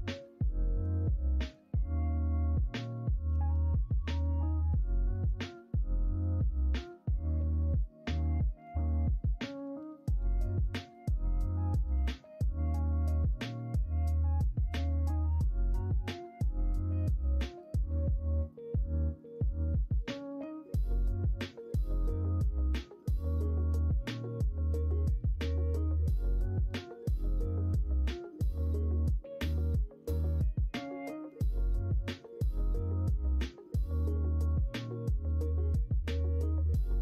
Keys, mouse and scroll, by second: 0.8 KP_3, 3.2 g, 4.8 s, 11.9 g, 24.8 shift+d, 27.6 s, 30.4 g.